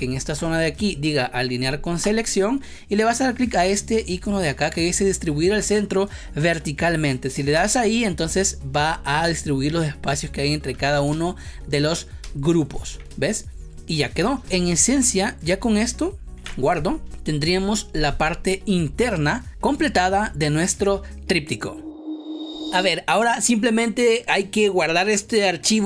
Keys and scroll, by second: 11.0 space, 13.0 space, 16.3 ctrl+s.